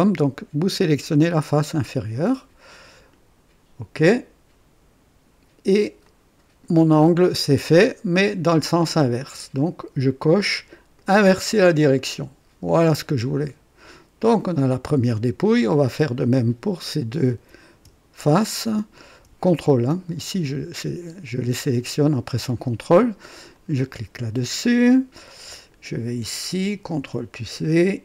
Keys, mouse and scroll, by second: 1.1 click, 6.0-6.8 drag, 7.0-8.2 drag, 10.9 click, 11.9-13.2 drag, 14.2 click, 14.9-15.9 drag, 16.3 click, 16.7-17.4 drag, 19.4 ctrl+click, 20.2-21.8 ctrl+drag, 23.5 click, 25.5 click, 26.9 ctrl+v.